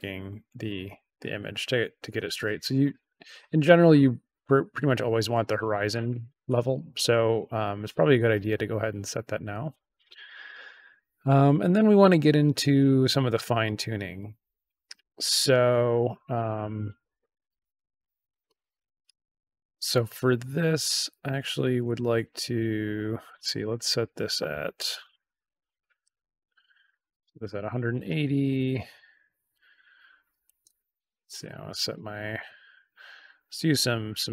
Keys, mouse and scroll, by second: 13.1 middle click, 13.2-13.8 scroll up 2, 14.1-15.0 scroll down 3, 18.1-18.5 scroll down 2, 18.5-19.0 scroll up 3, 21.7-23.2 drag, 23.6 click, 27.7 click, 28.5 click, 31.8-34.3 drag.